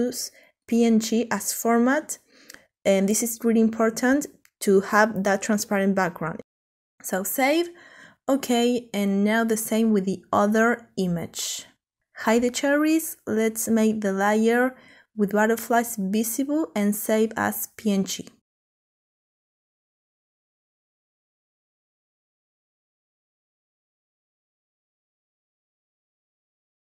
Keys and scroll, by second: 2.3 Delete, 25.2-26.8 typing.